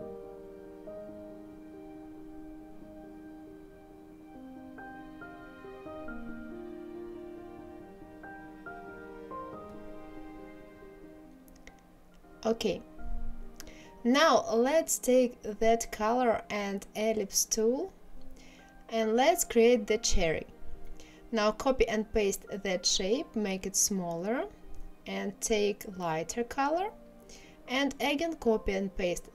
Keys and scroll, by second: 20.5 ctrl+c, 21.8 ctrl+f, 27.0 ctrl+c, 27.6 ctrl+f.